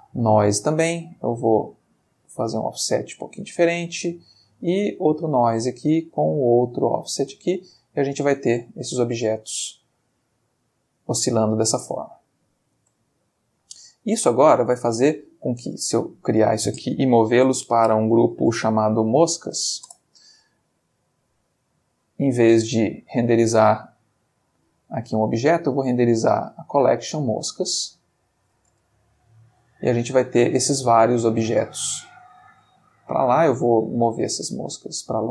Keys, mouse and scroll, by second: 0.0 click, 1.8 click, 3.5 click, 4.5 click, 5.3 click, 6.2 click, 7.2 space, 8.7-9.6 middle drag, 11.2-11.6 middle drag, 12.8 space, 13.1-13.7 middle drag, 15.6-16.4 drag, 17.4 m, 18.4 Return, 19.1-19.7 typing, 19.8 shift+Return, 21.4 click, 21.8 click, 24.9 middle click, 25.5 click, 26.6 click, 27.2 click, 28.0 click, 28.7 space, 29.7-30.4 shift+middle drag, 31.3-32.4 ctrl+middle drag, 32.7-33.2 ctrl+drag, 33.6-34.2 drag, 34.5 g.